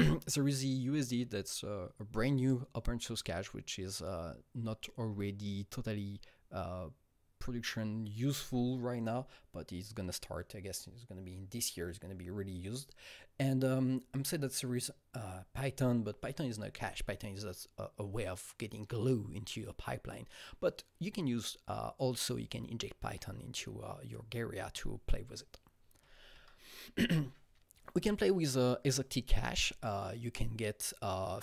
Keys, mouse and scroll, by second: 26.3 Right.